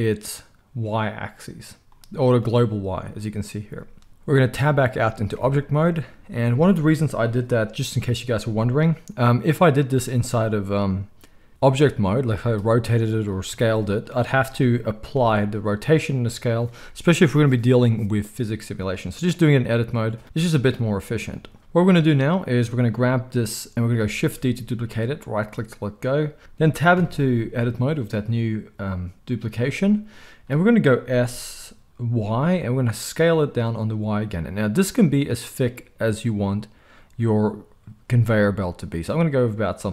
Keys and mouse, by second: 5.3 Tab, 12.0 r, 13.5 s, 15.1 ctrl+a, 21.6 Tab, 24.1 shift+d, 26.9 Tab, 31.1 s.